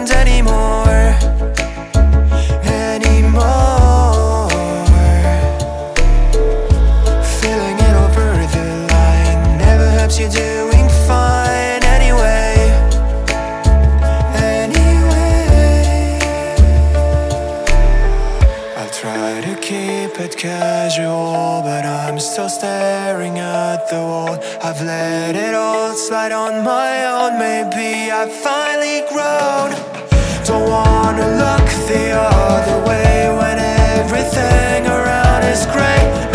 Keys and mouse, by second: 1.1 ctrl+middle click, 2.5 1, 3.0 k, 18.3 click, 19.0 shift+click, 25.9-26.9 middle drag, 31.2 click, 36.0 KP_1.